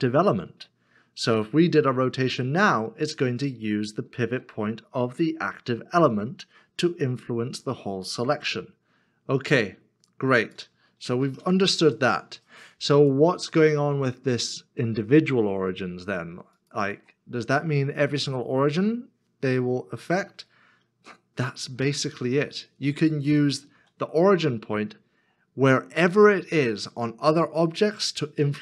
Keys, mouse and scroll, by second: 4.2 r, 6.0 z, 8.3 x, 11.2 x, 22.0 r, 23.8 z, 28.1 x.